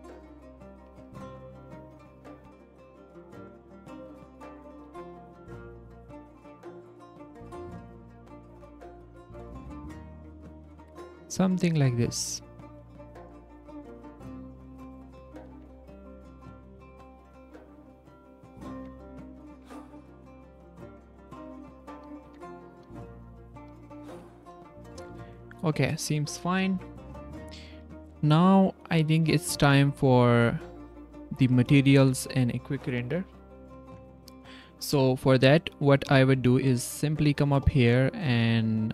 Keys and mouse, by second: 2.1 Tab, 2.9 click, 3.1 z, 3.7 s, 4.8 z, 5.2 g, 7.3 z, 7.6 s, 8.0 z, 8.2 click, 8.4 g, 9.8 Tab, 11.4 s, 11.5 drag, 11.8 click, 12.9 click, 13.1 click, 13.6 z, 13.9-14.5 drag, 14.8 click, 15.3 drag, 15.5 z, 16.9-18.6 drag, 18.7 Tab, 20.4-21.9 drag, 22.7 click, 23.1 drag, 23.8 drag, 24.4 click, 25.4 drag, 25.9-27.1 drag, 27.9-28.7 drag, 28.0-28.7 right drag, 28.7-29.4 middle drag, 29.6 middle drag, 30.0 drag, 30.0 right drag, 31.0 click, 31.3 z, 31.7 drag, 31.9 z.